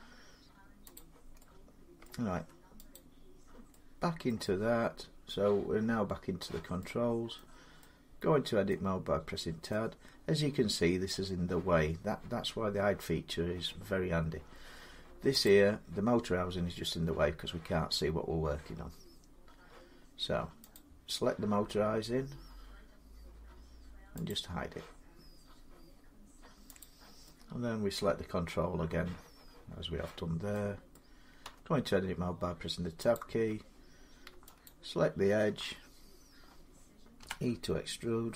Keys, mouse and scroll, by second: 0.7 click, 1.1 scroll down 1, 1.8 middle click, 2.2 Tab, 2.7 click, 4.1 middle click, 5.1 middle click, 7.1 middle click, 8.0-10.1 middle drag, 10.8 middle click, 15.2 click, 19.6-20.2 scroll, 20.5 click, 24.1 click, 25.8-26.3 scroll, 26.6 click, 27.7 middle click, 30.7 middle click, 30.9 scroll, 31.2 Tab, 32.9 click, 34.4 alt+click, 37.0 e.